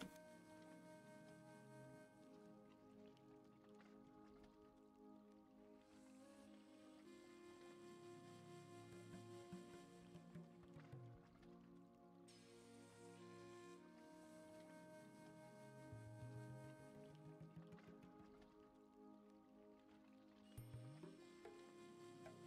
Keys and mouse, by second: 9.4-10.7 middle drag.